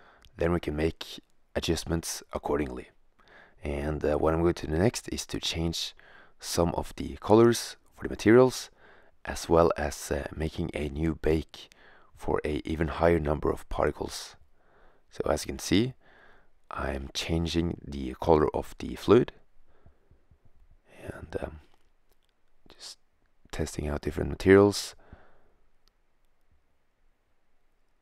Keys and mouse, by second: 7.7-8.7 drag, 9.0-11.2 drag, 15.9 shift+z, 20.4-21.4 drag.